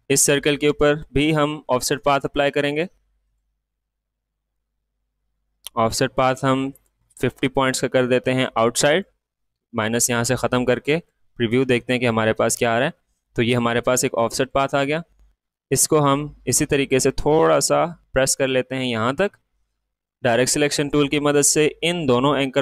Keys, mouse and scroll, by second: 6.7-18.2 drag, 18.2 space, 18.3 click, 18.8 space.